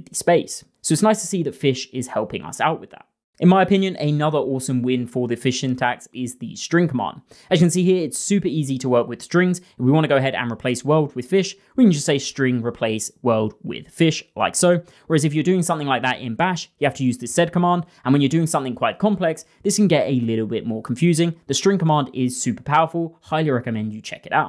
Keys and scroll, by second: 2.1 6, 6.5-7.6 typing.